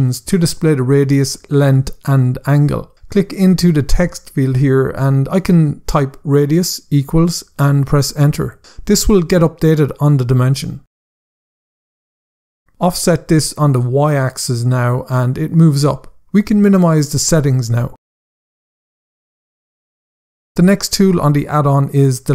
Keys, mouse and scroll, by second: 2.8 click, 3.7-5.0 typing, 6.3 typing, 7.2 Return, 10.5 click, 13.1 click, 16.4 click, 19.7 scroll down 1, 21.7 scroll up 1.